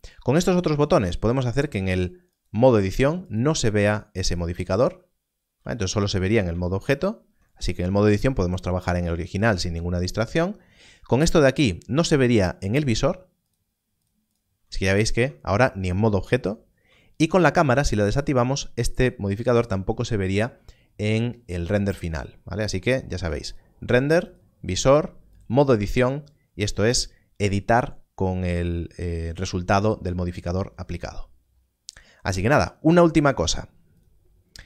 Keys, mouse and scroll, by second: 2.3 click, 6.4 Tab, 14.0 click, 15.1 Tab, 16.7 Tab, 23.2 click.